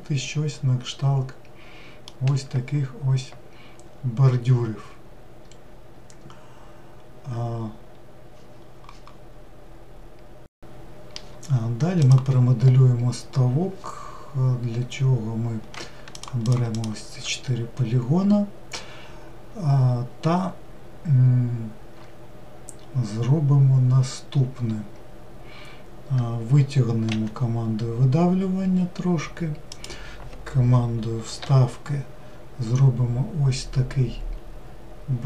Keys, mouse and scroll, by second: 18.1-19.6 scroll up 1.